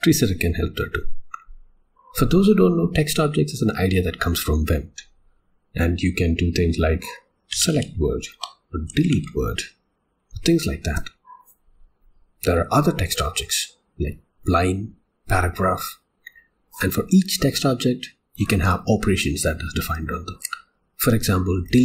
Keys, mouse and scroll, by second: 7.5 v, 8.4 Escape, 11.9 u.